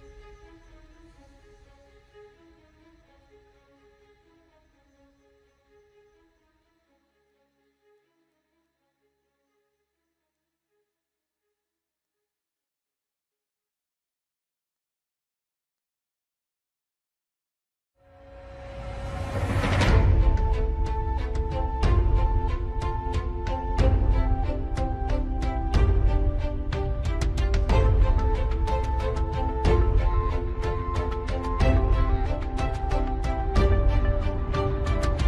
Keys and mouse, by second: 0.3-1.8 ctrl+KP_Add, 3.3 KP_7, 4.6 shift+d, 6.3 g, 10.9-12.1 middle drag, 12.5-14.0 middle drag, 14.5 middle click, 15.4 middle click, 17.0-18.1 middle drag, 18.6 middle click, 21.6-22.9 ctrl+KP_Add, 24.8 shift+d, 26.4 KP_7, 28.5 g, 31.1 KP_1, 32.7 middle click.